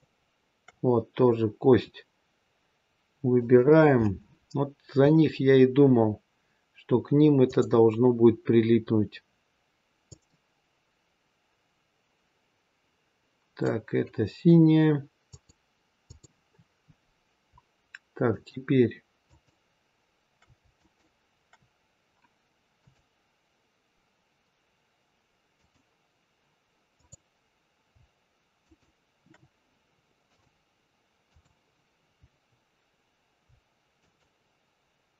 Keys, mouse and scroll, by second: 0.3 shift+click, 3.2 click, 10.0 click, 15.1 click, 18.2 shift+click, 22.7 click, 25.4 click, 26.9 click, 28.5 shift+click, 30.1 click, 33.9 shift+click.